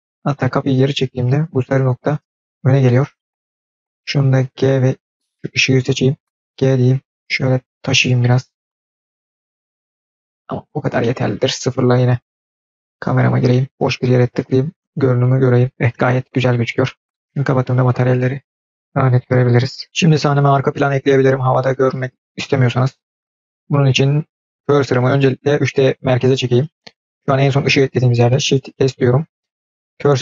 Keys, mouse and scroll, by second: 1.4-3.2 scroll down 4, 2.7-3.2 middle drag, 3.2 scroll down 3, 3.3-3.7 scroll up 4, 3.5-4.3 middle drag, 4.3 g, 5.5 click, 6.4 g, 7.8-8.6 middle drag, 9.3-10.3 drag, 10.3-10.9 scroll down 5, 10.8 scroll up 1, 10.9 middle click, 12.1 KP_0, 12.3-12.6 scroll down 4, 12.6-13.0 scroll up 2, 14.1 click, 15.0 click, 17.2 click, 22.8-23.7 scroll down 5, 23.7 scroll up 2, 27.0 scroll down 1, 28.6 shift+s.